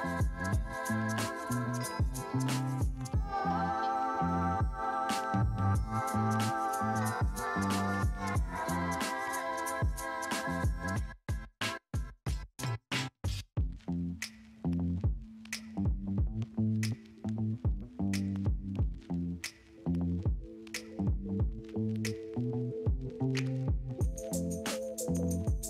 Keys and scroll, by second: 0.2 space, 3.0 space, 17.2 Escape, 18.1 [, 24.1 ], 25.2 ctrl+space.